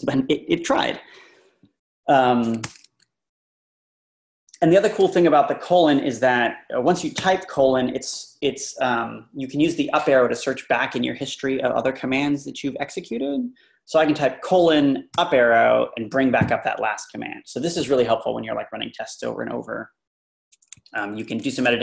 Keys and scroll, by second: 2.6 Return, 20.8 Escape.